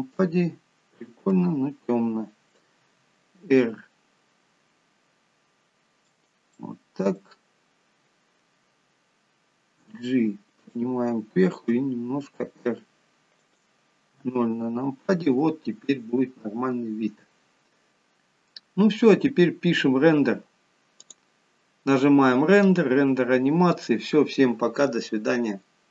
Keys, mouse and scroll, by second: 1.5 KP_0, 3.1 r, 6.8 middle click, 7.6-9.8 scroll down 6, 10.1 g, 12.0 r, 14.4 KP_0, 21.3 click.